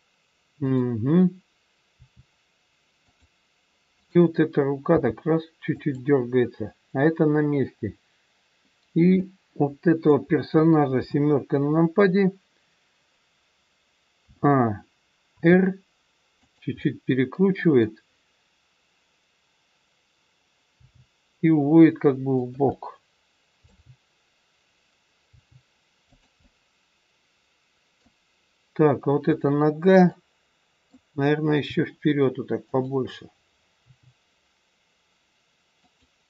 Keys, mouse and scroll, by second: 0.6 click, 1.9 r, 4.0 click, 4.8 g, 9.1 middle click, 11.0 KP_7, 14.2 a, 15.3 r, 16.7 middle click, 20.7 g, 22.7 middle click, 25.2 g, 26.3 middle click, 29.2 click, 30.1 middle click, 31.7 g, 33.8 g.